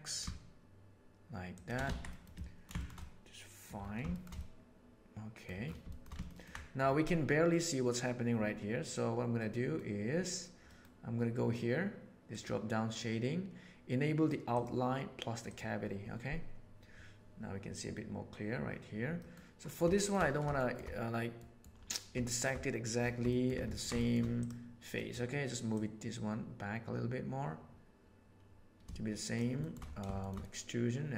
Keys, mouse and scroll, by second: 1.9 alt+a, 2.1 middle click, 2.3-2.9 ctrl+middle drag, 3.0-3.7 middle drag, 4.1-5.5 shift+middle drag, 5.8 shift+middle click, 6.2 ctrl+middle click, 9.4 middle click, 10.8 middle drag, 12.4-15.8 right drag, 19.2 middle drag, 19.9 shift+middle drag, 20.6 shift+middle click, 21.4 middle click, 22.2 shift+middle drag, 23.3 shift+middle click, 23.6 ctrl+middle click, 24.0 shift+middle click, 24.3 middle click, 24.9 middle click, 25.8-28.3 middle drag, 28.3 click, 28.8 shift+middle click, 29.6 shift+middle click, 30.2-31.1 shift+middle drag.